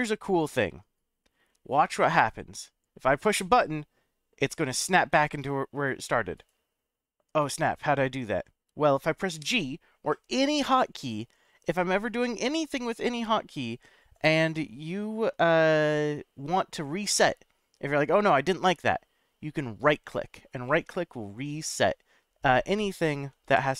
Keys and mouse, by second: 6.3 right click, 9.4 g, 19.8 right click, 20.6-22.1 middle drag, 23.5 g.